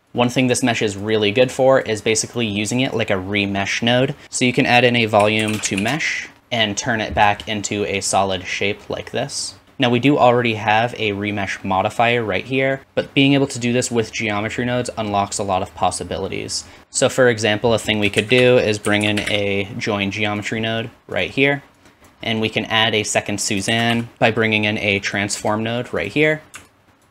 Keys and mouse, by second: 0.0 middle click, 0.2-6.4 drag, 4.2 shift+a, 6.6 typing, 12.8-16.8 drag, 16.8-21.9 middle drag, 16.8 x, 18.4 shift+a, 21.4 typing, 21.9-23.9 drag, 23.7 shift+a, 26.1-27.1 drag, 26.1 typing.